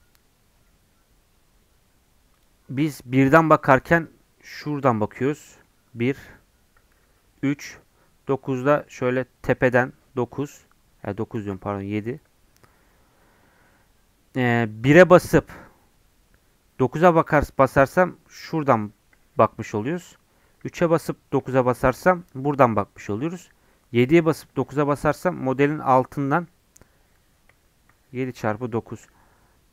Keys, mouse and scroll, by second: 2.3-11.5 drag, 11.5 ctrl+z, 11.9-29.7 drag.